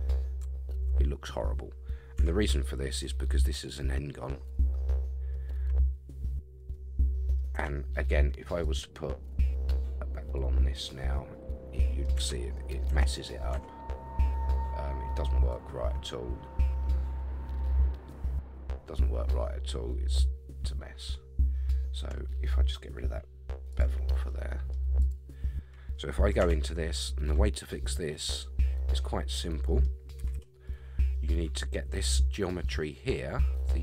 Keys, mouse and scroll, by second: 1.2-2.2 scroll up 1, 2.2 Tab, 2.6 middle click, 4.5 middle click, 6.7 middle click, 7.5 Tab, 8.6-10.4 drag, 11.1-12.0 middle drag, 12.1 Tab, 12.5 middle click, 13.5 Tab, 15.5-21.7 drag, 23.7 click, 24.3 middle click, 25.0 click, 26.4 Tab, 27.0-30.0 middle drag, 30.2 a, 30.3 a, 30.6 middle click.